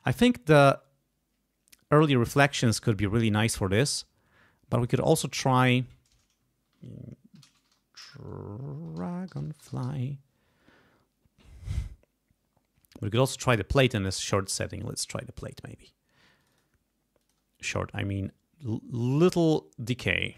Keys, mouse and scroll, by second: 4.7 click, 7.1-10.3 typing, 14.8 click, 16.3 click, 17.1 click, 18.2-19.6 drag.